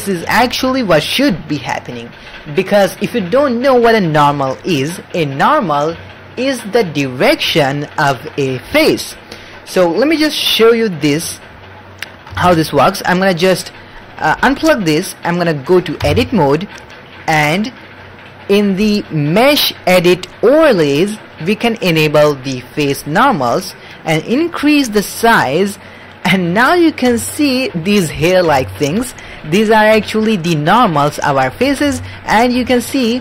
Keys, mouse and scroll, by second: 2.3-4.0 drag, 4.7-5.6 middle drag, 11.9 middle click, 12.4 shift+middle click, 13.2-14.6 drag, 16.0 Tab, 19.3-26.4 drag, 26.6 middle click, 27.8 ctrl+middle click, 28.6 shift+middle click, 28.9 middle click, 29.7 middle click, 30.0 shift+middle click, 30.4 middle click, 31.2 ctrl+middle click, 31.9 shift+middle click, 32.2 middle click, 32.6 alt+a, 32.7 middle click.